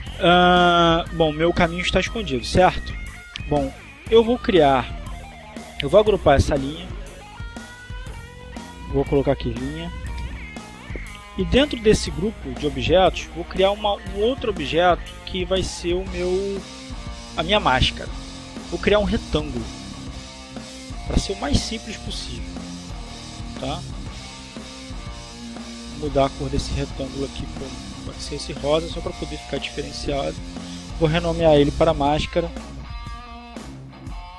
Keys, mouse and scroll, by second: 7.4 click, 8.1 click, 9.8-11.0 typing, 13.3 click, 14.1 click, 15.5 click, 17.0 click, 20.8 click, 23.8 click, 24.9 click, 26.6-27.5 drag, 27.9 click, 29.1 click, 31.3 click, 32.1-33.9 typing, 34.2 Return.